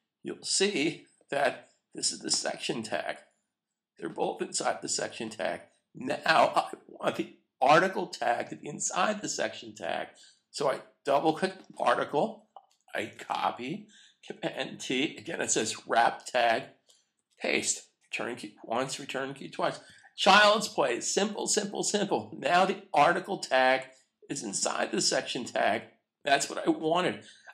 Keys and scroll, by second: 13.1 super+c, 14.7 super+t, 17.1 super+v, 17.9 Return, 19.8 super+s.